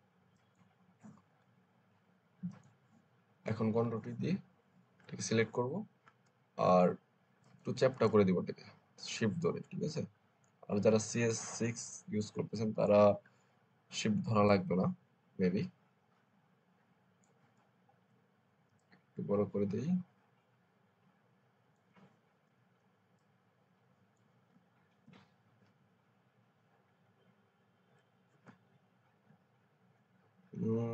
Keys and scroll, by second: 3.7 ctrl+t, 24.9 Return, 26.8 Up.